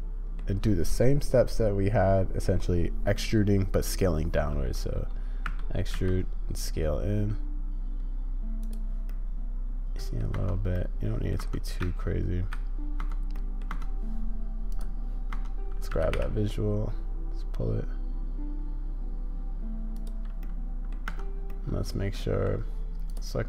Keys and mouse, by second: 9.1-10.2 drag, 10.3 Tab, 10.8-11.3 drag, 11.8 z, 13.0 Tab, 13.3 click, 15.9 g, 20.4-20.9 drag, 21.1 Tab, 21.5 click.